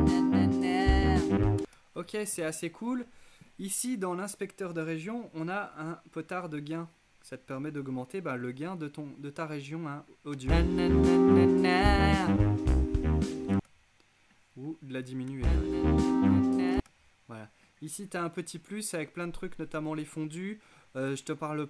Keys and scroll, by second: 1.6 space, 10.4 space, 13.6 space, 15.3 space, 16.8 space.